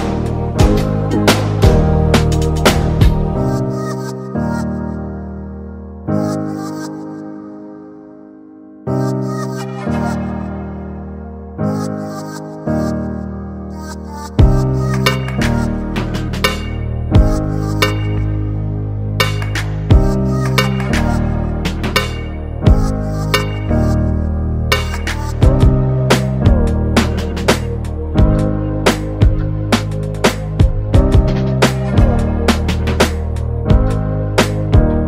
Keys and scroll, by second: 1.9 ctrl+space, 2.4-4.5 ctrl+space, 6.6 [, 7.0 [, 7.3-8.4 [, 8.5 [, 14.0 [.